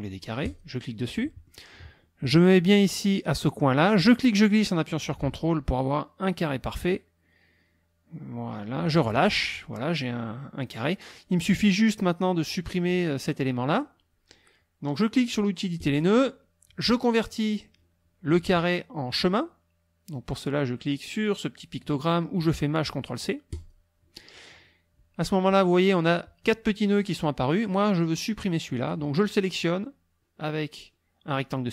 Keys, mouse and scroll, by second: 0.5 click, 1.1 click, 3.9-9.1 drag, 15.8 click, 23.5 click, 26.4-29.1 drag, 29.6-31.5 drag.